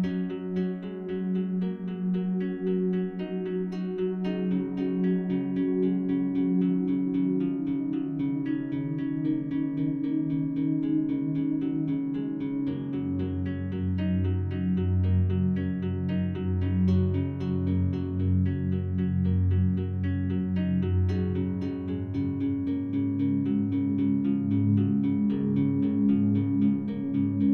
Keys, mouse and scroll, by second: 0.0 click, 0.8 click, 1.7 click, 2.7 click, 5.1-6.7 drag, 7.5-9.6 drag, 10.1 click, 10.8 click, 11.3 click, 11.9 shift+click, 12.8 shift+click, 13.9 shift+click, 14.4 shift+drag, 15.2 click, 16.1 ctrl+d, 16.2 ctrl+d, 16.7-22.4 space, 18.6-19.7 drag, 20.6 ctrl+shift+click, 22.4 click, 24.8 ctrl+click, 26.1 click.